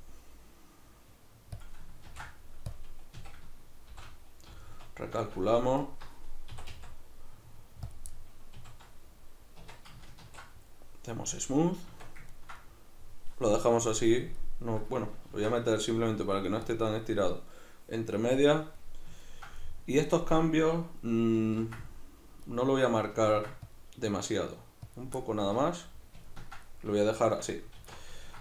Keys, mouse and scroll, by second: 1.7 click, 2.1 ctrl+f, 3.1 a, 3.9 shift+n, 4.5 z, 5.2-5.8 shift+middle drag, 5.8 alt+right click, 6.5 e, 7.9 click, 8.1-13.9 middle drag, 8.6 a, 9.6 Tab, 10.3 ctrl+2, 11.9 Tab, 13.9-14.4 drag, 14.4-28.4 middle drag, 15.3 ctrl+r, 17.0 right click, 21.6 ctrl+r, 22.6 right click, 23.3 ctrl+r, 25.0 click, 25.5 Tab, 27.8 alt+q.